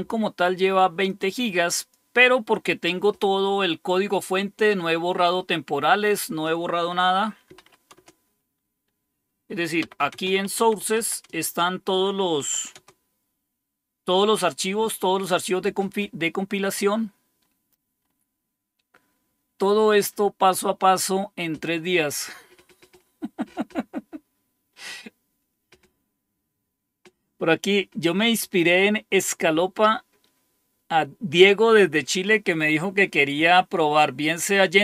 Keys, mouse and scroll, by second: 1.0-2.3 drag, 2.5 click, 7.1-8.0 typing, 9.5-10.9 typing, 11.2 Return, 12.0-12.8 typing, 17.2-19.4 scroll up 2, 20.0-22.3 scroll down 3.